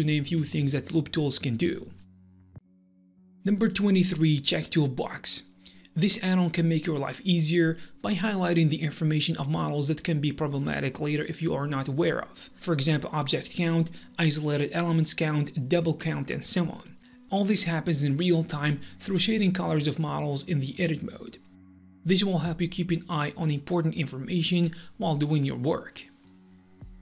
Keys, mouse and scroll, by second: 0.2 click, 1.1 click, 1.6 Delete, 1.7 g, 1.9 a, 2.3 click, 2.5 middle click.